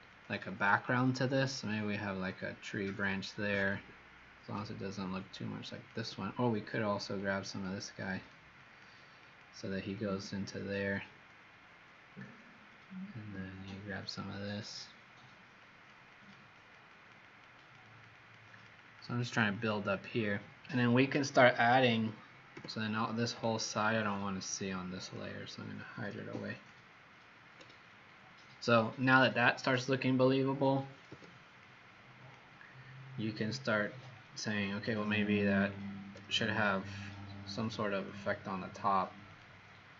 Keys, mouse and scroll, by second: 0.0 click, 0.4 click, 0.9 click, 1.3 click, 5.7 alt+click, 7.3 click, 8.6 click, 9.2 click, 9.9 click, 10.5 click, 14.0 alt+click, 15.5 click, 16.0 click, 16.5 click, 16.9 click, 17.3 click, 17.6 click, 17.8 click, 18.1 click, 18.5 click, 18.8 click, 19.1 click, 19.5 click, 22.4 m, 23.4 alt+scroll down 3, 24.3 click, 26.4 alt+click, 31.0 z, 31.5 click, 33.6-35.2 alt+scroll down 3, 35.2-37.5 alt+scroll down 1, 37.5 click, 38.0 click, 39.2 click.